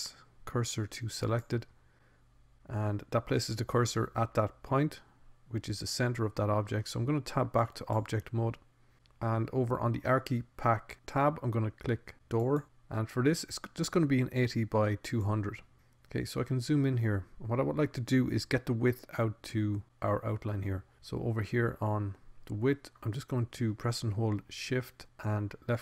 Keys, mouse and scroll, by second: 1.6 shift+s, 8.0 Tab, 13.4 click, 18.2-20.6 middle drag.